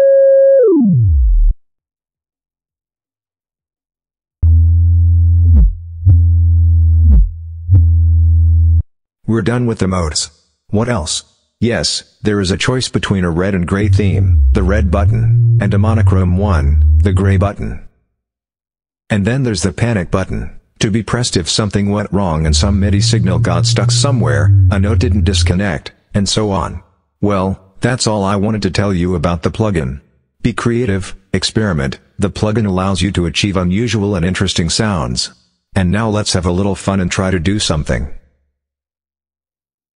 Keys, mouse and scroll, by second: 2.9 click, 4.2-8.8 drag, 12.8 click, 13.6-17.4 drag, 18.0 click, 19.3 click, 22.2-25.5 drag, 29.7 click, 30.6 click, 39.5 click.